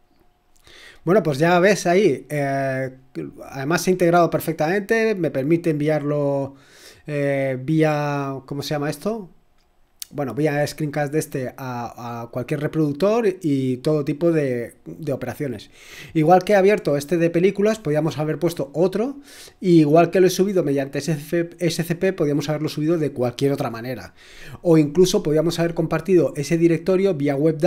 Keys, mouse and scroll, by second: 13.2 click.